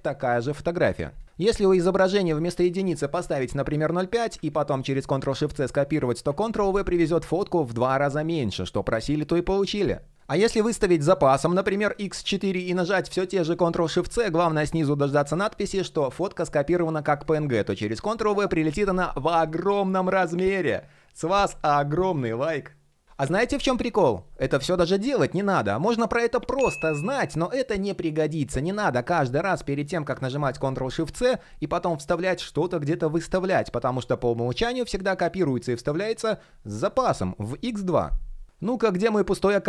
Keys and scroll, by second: 4.9 shift+super+c, 6.3 super+v, 13.0 shift+super+c, 17.5 super+v.